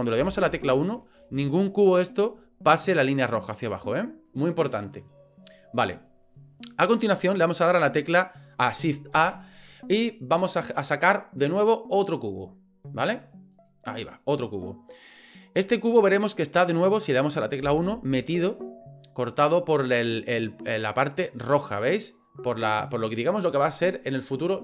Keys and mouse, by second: 0.2 KP_1, 1.5 shift+middle click, 4.4-4.7 middle drag, 4.9 middle click, 5.2 middle drag, 6.1 middle drag, 9.1 shift+a, 14.7-15.6 middle drag, 17.6 KP_1.